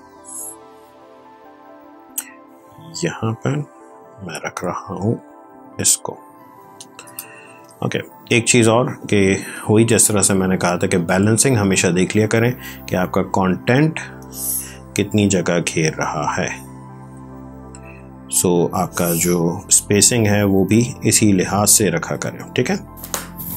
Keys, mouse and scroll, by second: 0.0 click, 7.9 v, 9.1 m, 9.9 click, 14.1 click, 17.4 ctrl+r, 18.6 click, 21.1 ctrl+d, 22.0 v.